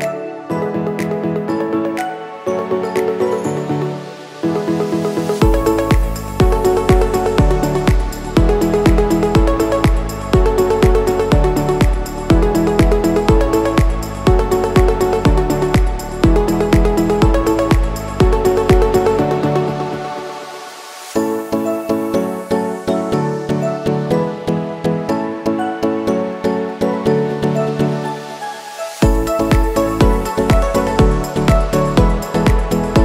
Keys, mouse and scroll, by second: 0.0-0.8 typing, 1.9-5.9 drag, 5.9 click, 10.3-11.6 typing, 13.6 space, 13.6-18.9 drag, 21.8 click, 25.1-33.0 drag.